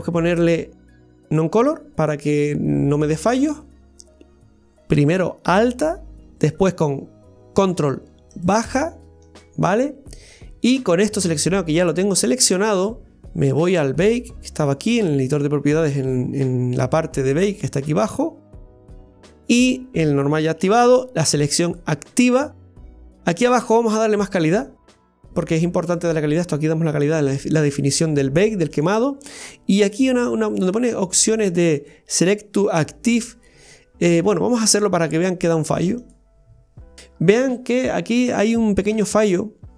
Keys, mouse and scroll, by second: 8.4 ctrl+click, 14.6 click, 16.4-18.4 scroll down 1, 18.4 click, 18.7-20.4 scroll down 1, 21.7 click, 24.0-27.0 drag, 28.7-29.2 drag, 29.2-30.0 scroll down 1, 30.0 click, 30.6-31.1 drag, 31.1-34.4 scroll down 1, 36.0 click, 36.9 scroll down 2.